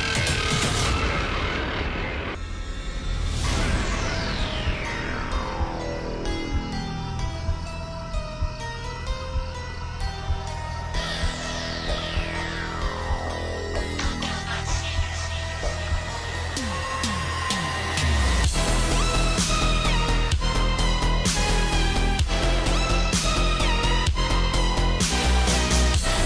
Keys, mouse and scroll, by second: 0.7 p, 1.5 click, 3.2-3.9 alt+scroll up 1, 4.0 a, 5.0 click, 5.6-11.7 shift+drag, 11.7 alt+scroll down 1, 12.2 click, 13.2 alt+shift+click, 14.1 alt+scroll up 1, 14.3-19.2 drag, 19.2 alt+scroll up 1, 19.3-26.2 drag.